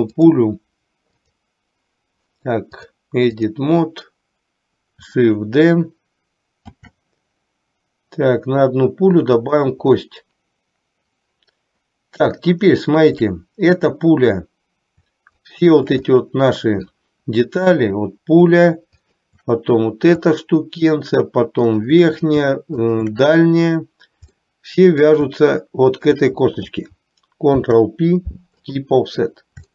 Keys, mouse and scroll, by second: 0.2-1.6 drag, 2.8-3.8 drag, 6.8 shift+d, 12.6 shift+middle click, 15.4 shift+click, 16.3 middle click, 17.9 click, 19.1 shift+click, 20.4 shift+middle click, 21.8 shift+click, 23.1 shift+click, 24.4 middle click, 26.2 shift+click, 27.7 ctrl+p.